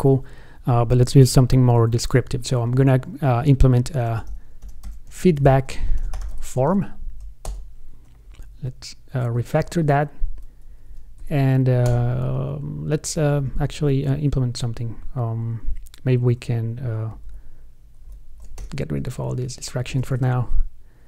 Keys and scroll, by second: 17.4 alt+shift+Up, 20.1 super+d.